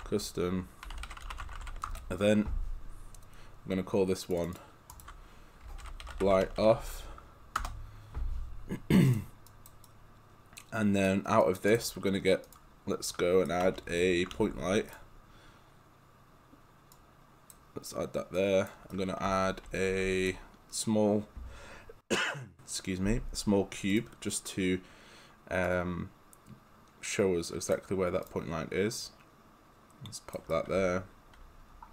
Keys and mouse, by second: 0.0-2.3 typing, 4.3 click, 5.6-7.3 typing, 7.6 Return, 9.1 click, 9.8 right click, 11.4 click, 12.5 click, 13.1 right click, 14.9 click, 19.0 right click, 23.9 click, 25.7 click, 30.5 right click, 31.0 right click.